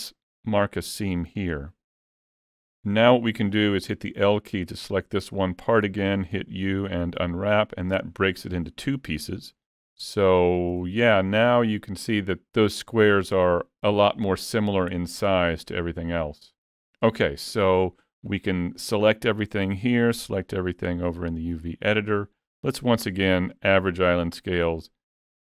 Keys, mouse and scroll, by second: 1.3 alt+a, 1.6-2.1 scroll down 3, 2.0 middle click, 9.9 Tab, 10.8 alt+a, 11.2 middle click, 12.6 middle click, 14.4 middle click, 16.7-17.4 scroll down 3, 17.0 middle click, 17.6 Tab, 18.5 a, 21.6 click, 24.3 click.